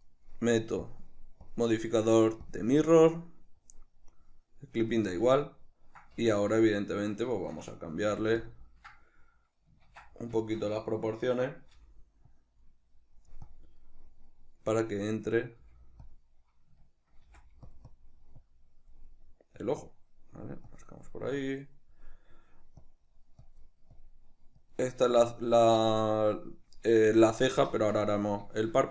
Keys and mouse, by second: 0.9 drag, 1.5-3.7 drag, 4.8 right click, 5.1-8.5 ctrl+middle drag, 6.2 Tab, 8.1 f, 8.5 click, 8.7-12.3 ctrl+middle drag, 10.0 ctrl+d, 11.7 g, 12.3 click, 12.8 middle click, 13.5 click, 14.1-16.1 middle drag, 15.6 g, 16.1 click, 16.9 ctrl+middle click, 17.3 f, 17.9-19.1 drag, 19.1 middle click, 19.6 click, 20.0 middle click, 20.7 click, 21.2-22.8 middle drag, 22.8-25.3 drag, 25.3-28.9 middle drag.